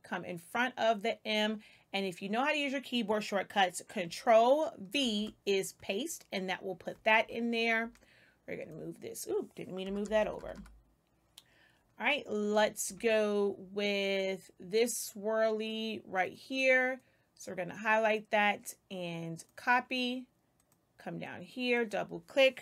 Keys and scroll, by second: 4.9 ctrl+v, 7.7 space, 9.8 BackSpace.